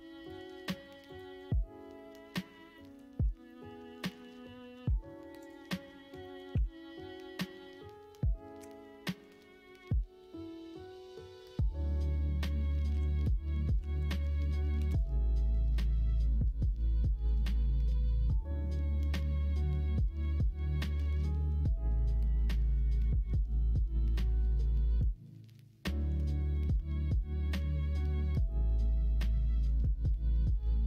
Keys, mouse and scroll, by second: 2.7 middle click, 3.4 middle click, 3.9 middle click, 6.2 middle click, 6.5 s, 15.9 middle click, 16.7 middle click, 20.8 middle click.